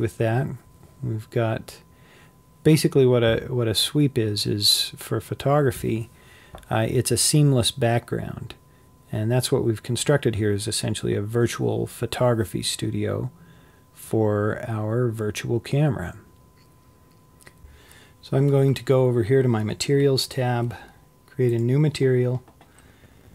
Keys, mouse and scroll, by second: 6.7-7.5 scroll up 4, 7.5-10.9 scroll down 1, 10.9 click, 11.5-17.6 middle drag, 21.8 click.